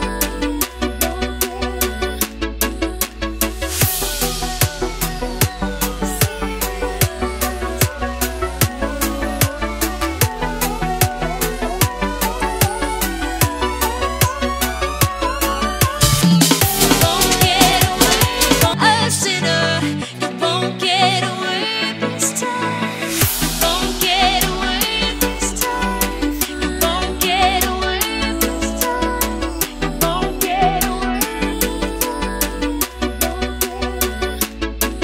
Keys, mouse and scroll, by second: 1.3 Tab, 2.9 click, 3.3 ctrl+c, 3.5 alt+Tab, 4.3 v, 5.0 click, 6.2 Return, 7.0 Return, 7.8 click, 8.3 alt+scroll down 2, 9.5 scroll up 1, 11.6 click, 15.0-16.4 scroll up 1, 16.4 click, 28.6 click, 30.0 ctrl+z, 31.3-32.2 scroll up 1, 32.2 click, 34.9 click.